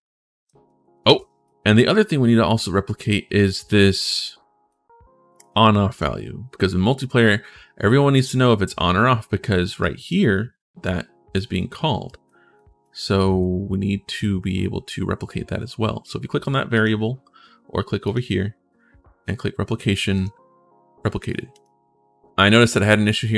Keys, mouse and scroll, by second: 0.0-0.7 typing, 1.2 right click, 1.7-2.8 right drag, 3.2-4.5 right drag, 5.2 click, 5.6 click, 8.6 right click, 9.6 right click, 11.8 right click, 12.4 right click, 13.0 right click, 13.8 click, 16.5 click, 17.3 middle click, 17.8 click, 19.9 click, 21.3 click.